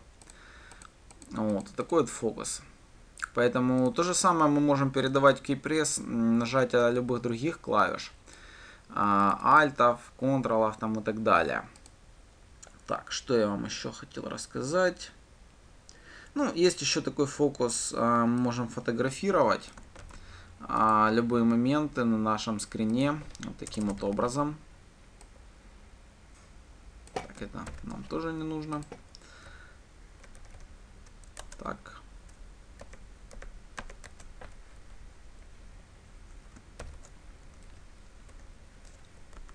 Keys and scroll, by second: 20.5 ctrl+c, 24.7 ctrl+v, 28.2 ctrl+/, 37.3 ctrl+/.